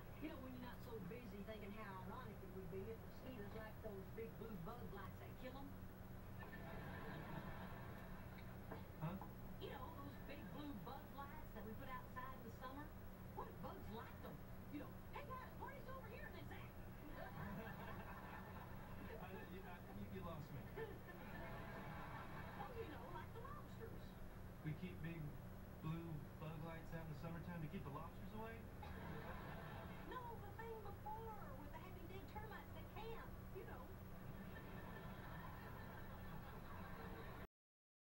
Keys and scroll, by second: 13.2 shift+Right, 14.5 Right, 16.7 Right.